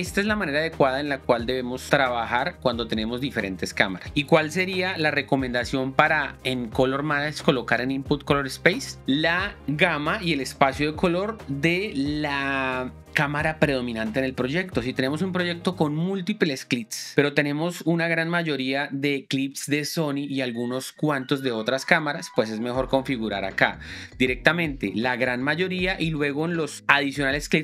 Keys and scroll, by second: 5.3 shift+9.